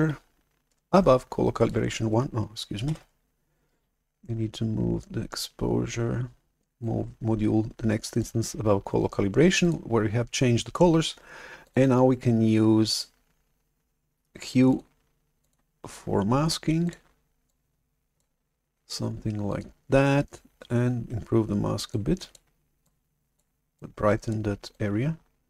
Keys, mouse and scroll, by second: 0.8-2.2 shift+drag, 2.9 shift+super+F11, 6.7-8.1 ctrl+shift+drag, 9.5 click, 11.5 click, 12.8 click, 14.6 click, 16.7 click, 17.4 click, 19.4 click, 21.8 click, 22.7 click, 23.6 click, 24.6 click.